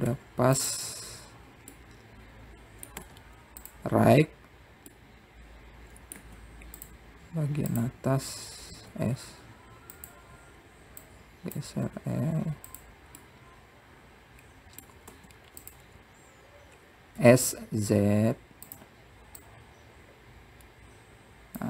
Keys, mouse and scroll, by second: 1.0 middle click, 3.6-4.8 middle drag, 5.6-6.7 right drag, 6.7-8.0 middle drag, 9.5 click, 10.5 s, 12.8 click, 13.6 s, 15.0-16.9 middle drag, 19.0 s, 21.3-21.6 drag.